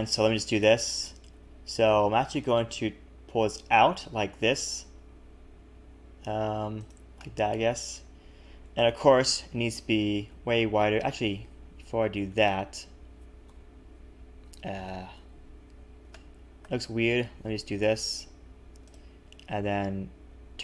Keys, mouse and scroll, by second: 1.0 e, 7.2 middle click, 9.2 KP_1, 10.2 s, 11.5 ctrl+z, 12.5 ctrl+shift+z, 13.5 KP_7, 15.1 ctrl+KP_7, 16.1 shift+middle click, 17.2 g, 19.2 r.